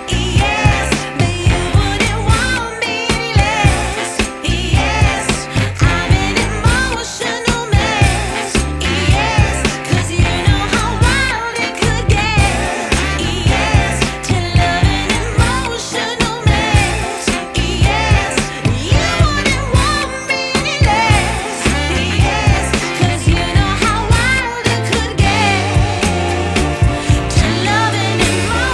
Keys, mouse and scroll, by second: 0.5 click, 2.7 space, 3.5 click, 4.3 ctrl+d, 4.5 click, 4.7 ctrl+d, 5.3 click, 6.2 shift+d, 6.4 click, 7.0 click, 7.5 click, 7.9 click, 8.3 click, 8.8 click, 9.3 click, 10.1 click, 10.3 click, 10.6 click, 14.4 drag, 20.7 click, 21.6 click, 23.7 click, 25.3 click, 27.2 click, 27.9 click.